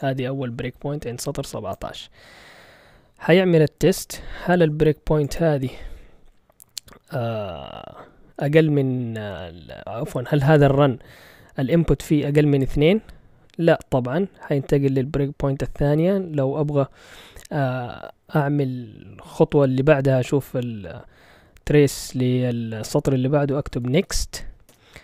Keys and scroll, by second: 23.3-24.5 typing, 24.7 Return.